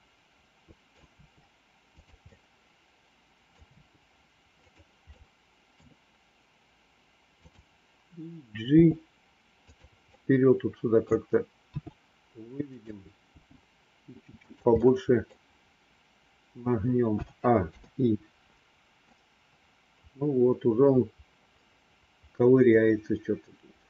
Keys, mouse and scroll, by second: 1.0 r, 2.2-3.4 middle drag, 3.7 r, 5.0 middle click, 7.4 click, 8.7 g, 10.0 middle click, 11.7 r, 13.3 g, 14.7 middle click, 14.7 scroll up 1, 17.0 a, 17.7 i, 19.0-23.8 drag.